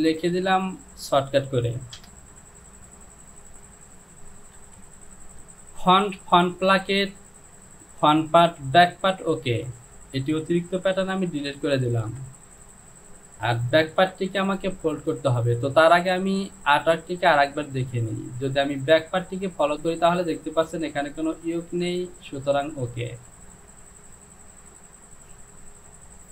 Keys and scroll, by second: 2.2 Return, 4.8 j, 11.0 shift+z, 11.5 shift+z, 13.9 Home.